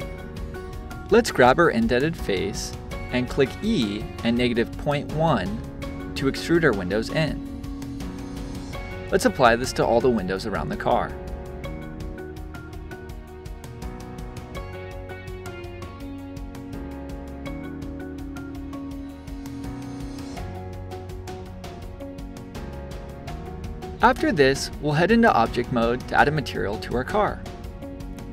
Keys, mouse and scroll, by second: 1.4 click, 2.5 e, 6.5 click, 8.1 -, 9.3 Escape, 10.0 e, 11.8 click, 12.2 middle click, 12.6 e, 14.8 click, 15.9 e, 17.8 middle click, 18.6 click, 20.2 e, 21.6 click, 21.8 scroll down 2, 22.1-23.5 shift+middle drag, 23.5 scroll down 1, 24.1-27.1 drag.